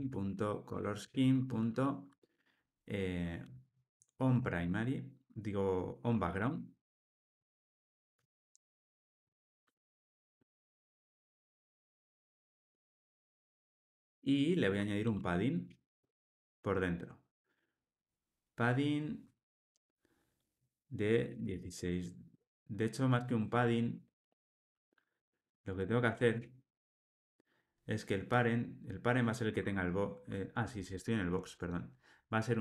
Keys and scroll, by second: 7.4 Return, 9.1 alt+super+l, 19.2 Return, 23.5 Escape.